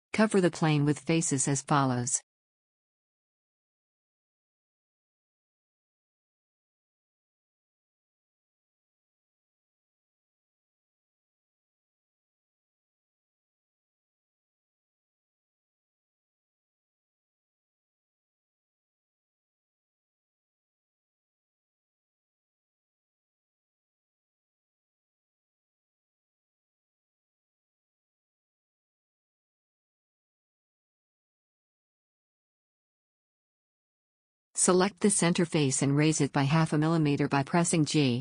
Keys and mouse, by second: 3.1 f, 3.4 a, 6.4 f, 6.7 a, 9.3 f, 9.5 a, 12.1 f, 12.3 a, 15.0 f, 15.2 a, 16.3 f, 16.5 a, 20.6 f, 20.8 a, 23.1 f, 23.3 a, 25.4 f, 25.6 a, 28.1 f, 28.3 a, 29.6 f, 29.9 a, 36.9 g.